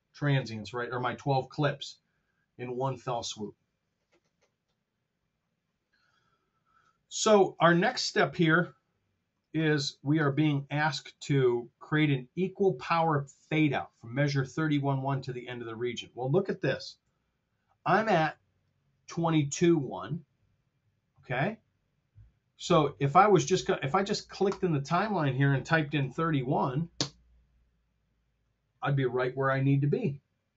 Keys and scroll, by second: 7.9 super+Tab, 15.4 super+Tab, 16.9 r, 25.9 typing.